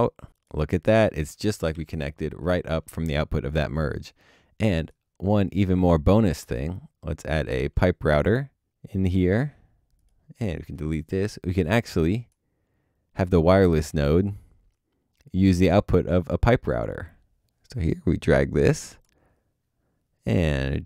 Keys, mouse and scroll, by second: 1.7 Delete, 9.7 alt+click, 10.4 double click.